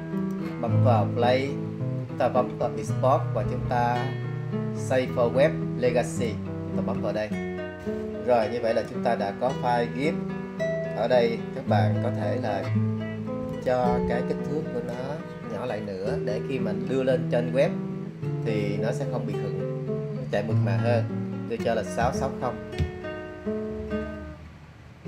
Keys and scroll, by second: 22.1 6, 22.3 6, 22.9 0.